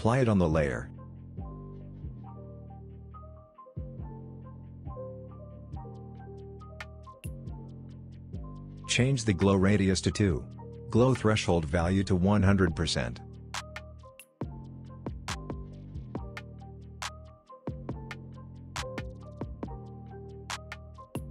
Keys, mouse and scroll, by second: 0.0-1.6 drag, 5.0-6.9 drag, 8.6 Return, 10.2-15.5 drag.